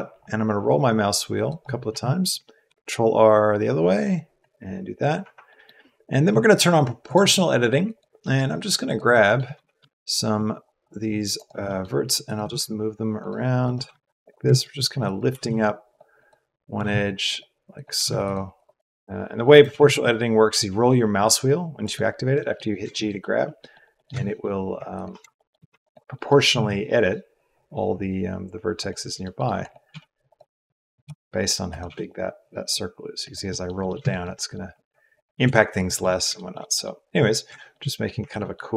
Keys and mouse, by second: 2.6 ctrl+r, 7.8 click, 8.8 click, 9.5 g, 12.2 click, 12.4 g, 13.7 g, 15.0 click, 15.2 g, 16.1 click, 16.7 g, 17.9 g, 25.3 shift+click, 26.1 click, 26.5 g, 29.1 click, 29.8 g, 30.9 click, 31.8 g, 33.4 click, 35.1 click, 35.4 g.